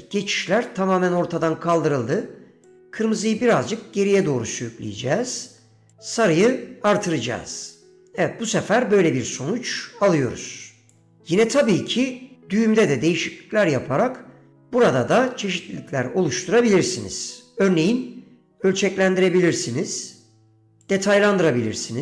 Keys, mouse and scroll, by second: 2.8-4.5 drag, 6.0-11.1 drag, 11.7-12.8 middle drag, 16.5 middle click, 18.6-20.8 drag, 20.9-22.0 drag.